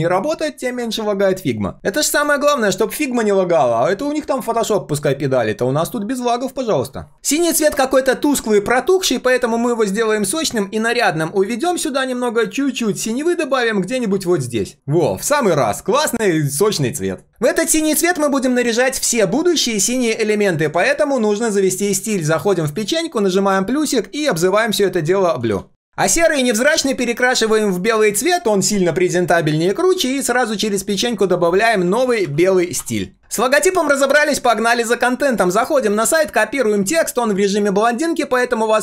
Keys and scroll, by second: 36.8 ctrl+c.